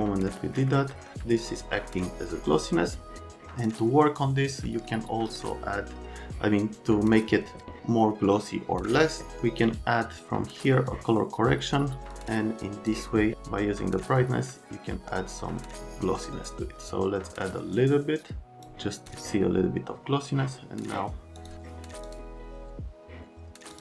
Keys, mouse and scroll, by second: 0.9 right click, 1.2 click, 9.6 click, 10.9 click, 12.1 click.